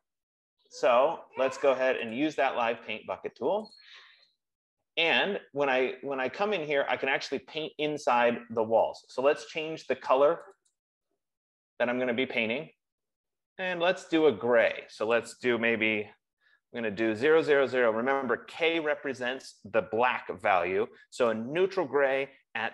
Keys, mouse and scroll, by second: 2.5 click, 4.0 click, 11.1 click, 11.3 click, 15.7 click, 16.4-17.7 typing.